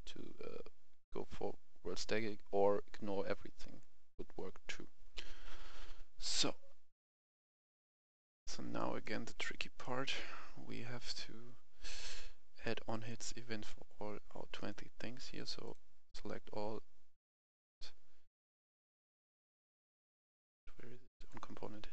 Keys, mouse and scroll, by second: 3.8 click, 7.0 right click, 7.8 click, 8.1 F11, 8.1 F10, 8.8 right click, 9.3 scroll down 1, 9.6 right click, 9.9 scroll down 1, 11.0 click, 11.8-12.1 scroll up 1, 12.9 shift+click, 13.4-14.1 scroll down 1, 14.6 right click, 15.6 click.